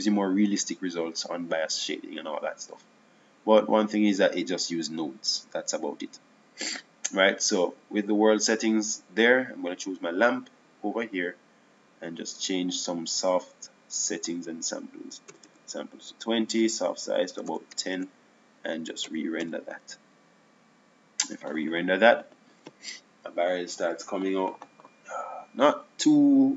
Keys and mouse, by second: 10.4-11.9 drag, 11.9-14.5 right drag, 14.5-18.2 drag.